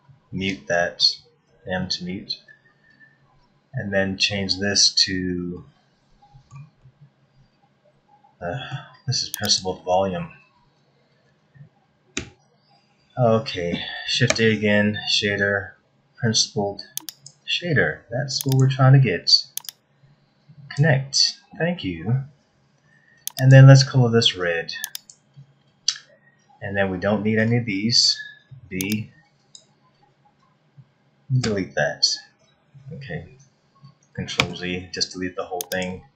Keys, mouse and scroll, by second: 1.4 m, 4.8-5.4 scroll down 4, 5.5 middle click, 6.8 middle click, 9.4 click, 12.2 x, 14.3 shift+a, 19.6 click, 23.3 click, 26.5 scroll down 3, 27.9 a, 28.5 b, 31.3 Delete, 32.5-33.2 scroll down 5, 33.2-33.9 scroll up 3, 34.4 ctrl+z, 35.6 click.